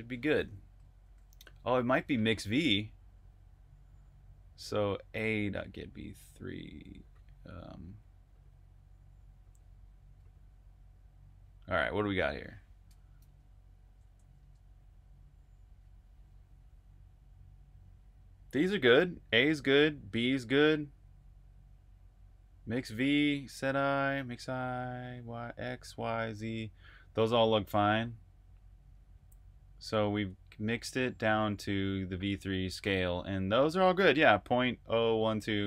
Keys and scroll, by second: 0.9 typing, 13.1 super+Tab.